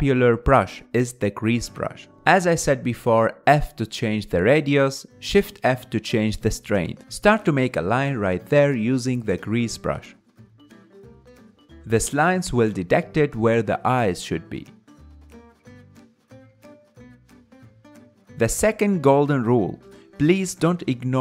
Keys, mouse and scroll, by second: 0.0 click, 0.9-2.1 ctrl+middle drag, 2.1 f, 4.8-6.3 drag, 6.3 shift+d, 7.0 shift+f, 9.1 f, 10.3 f, 11.1 f, 11.3-15.0 drag, 17.1-20.0 ctrl+middle drag, 20.0-21.1 drag, 21.1 middle click.